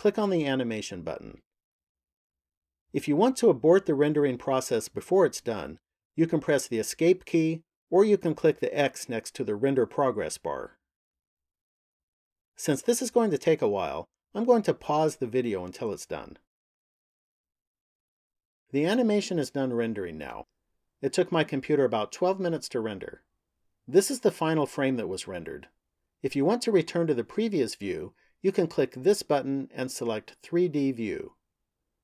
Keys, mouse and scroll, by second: 2.0 click, 31.7 click.